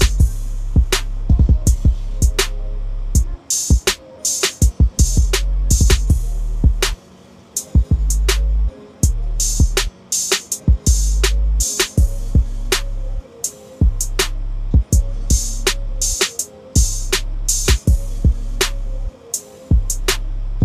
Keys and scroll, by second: 0.0 5, 17.3 ctrl+z.